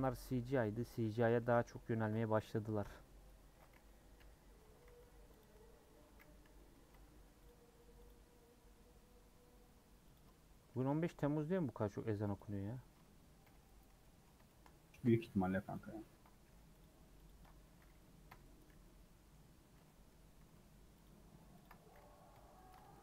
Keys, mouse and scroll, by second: 0.2 middle click, 0.7 scroll down 1, 0.8 middle click, 1.4 a, 2.4 u, 3.2 middle click, 4.1 /, 4.6 Tab, 4.8 h, 5.4 click, 6.4 /, 6.7 middle click, 6.9 Tab, 7.1 3, 7.4 click, 8.1 click, 8.6-9.0 scroll up 2, 10.1 click, 12.2 c, 13.4 ;, 14.0-15.7 middle drag, 15.7 click, 16.4 3, 16.8 click, 17.3 ctrl+click, 18.3 ;, 18.7 scroll down 1, 18.9 middle click, 19.5 scroll up 1, 19.8 middle click, 20.1 scroll up 1, 20.4 3, 21.0 click, 21.6 ctrl+click, 22.3 ;, 22.9-23.0 shift+middle drag.